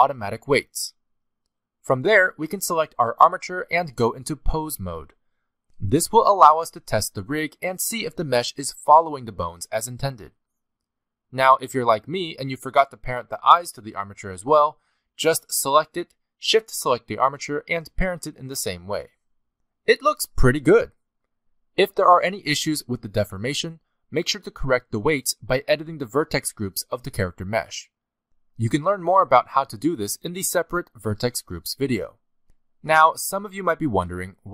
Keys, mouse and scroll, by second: 2.5 click, 4.3 click, 6.4 z, 7.1 middle click, 7.6 click, 7.9 scroll up 1, 8.0 middle click, 8.3 r, 9.6 click, 10.2 middle click, 10.4 r, 11.4 click, 11.7 middle click, 12.0 r, 12.9 middle click, 13.3 z, 13.8 shift+middle click, 14.0 middle click, 14.3 scroll up 1, 14.4 a, 14.8 alt+r, 15.3 ctrl+Tab, 15.5 click, 15.7 scroll up 2, 15.9 shift+middle click, 16.5 shift+click, 18.0 ctrl+p, 19.5 click, 20.0 ctrl+Tab, 20.2 click, 20.3-21.3 scroll down 2, 20.5 r, 21.8 middle click, 22.1 r, 22.8 r, 23.7 r, 24.7 click, 25.0 r, 26.1 click, 26.4 r, 27.0 shift+middle click, 28.0 click, 28.3 scroll down 2, 28.4 middle click, 28.8 r, 29.2 g, 29.8 middle click, 30.6 click, 30.8 middle click, 31.6 middle click, 32.0 shift+middle click, 32.1 shift+middle click, 32.3-32.8 scroll up 1, 32.8 scroll up 1, 32.8 a, 33.5 alt+r, 33.6 alt+g, 33.9 shift+middle click.